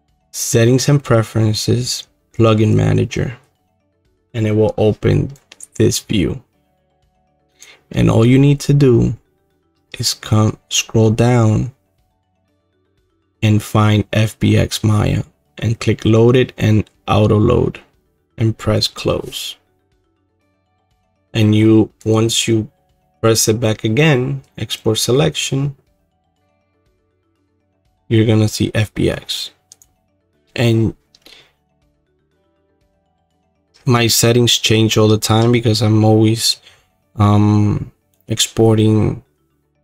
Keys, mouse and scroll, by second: 9.4-10.8 middle drag, 9.6-11.4 scroll, 11.4-13.0 scroll, 13.0-18.1 scroll, 20.2-33.1 drag, 33.1 middle click, 33.7-34.5 scroll, 34.5 scroll, 34.7-38.2 middle drag, 38.2-39.8 scroll.